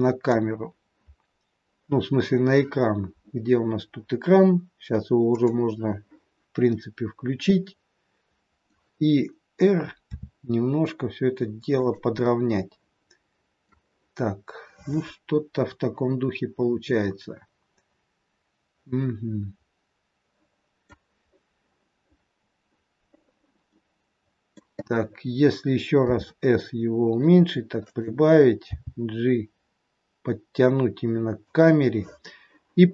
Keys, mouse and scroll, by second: 3.5-5.0 scroll down 10, 5.4 click, 6.2-6.8 scroll down 2, 6.6 middle click, 10.0 r, 12.1 middle click, 17.0 middle click, 23.6 middle click, 26.0 s, 28.7 g.